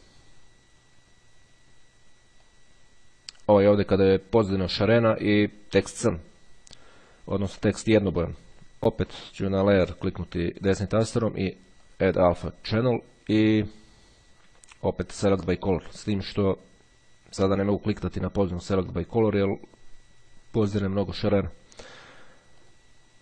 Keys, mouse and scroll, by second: 2.4-4.1 drag, 9.0 right click, 11.7 click, 15.0-16.3 drag, 17.3 click, 19.5 click, 22.8-23.2 drag.